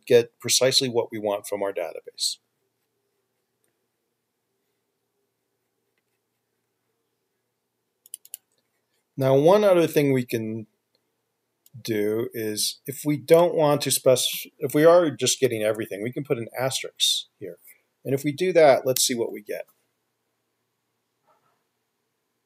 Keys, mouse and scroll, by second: 15.6 typing, 19.4 ctrl+F5.